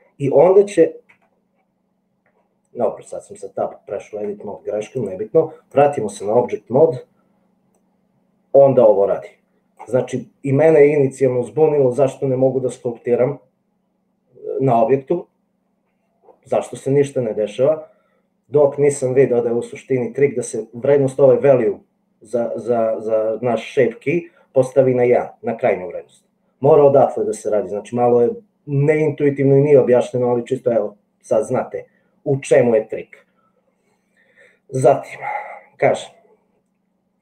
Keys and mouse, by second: 1.1 Tab, 5.0-6.4 drag, 7.9-10.0 drag.